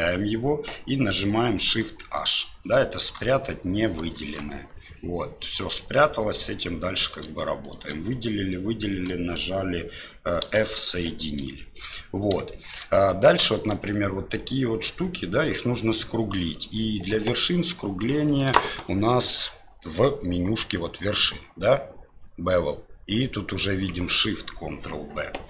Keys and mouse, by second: 4.1 shift+h, 7.0 right click, 7.6 shift+right click, 11.1 f, 11.6 middle click, 12.5 shift+middle click, 16.5 right click, 18.2-24.8 drag.